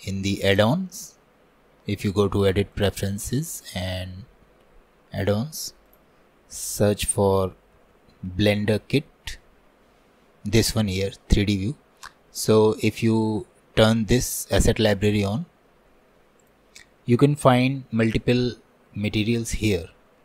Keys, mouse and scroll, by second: 3.0-20.2 drag.